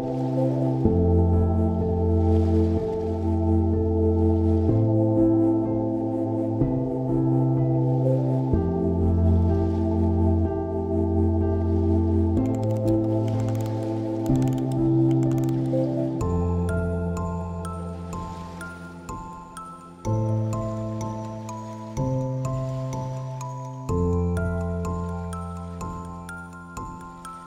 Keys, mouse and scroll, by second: 25.4 click.